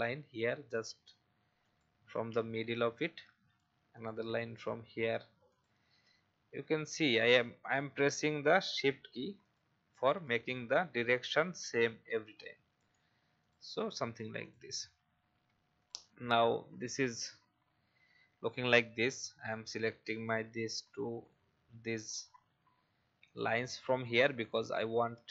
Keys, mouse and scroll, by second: 1.6 shift+click, 2.7 Escape, 3.9 click, 5.5 shift+click, 6.4 Escape, 7.6 click, 9.4 shift+click, 10.5 Escape, 13.4 click, 14.4 shift+click, 15.3 shift+v, 15.8 click, 20.2 shift+click, 21.2 shift+click, 23.2 shift+click, 24.4 shift+click.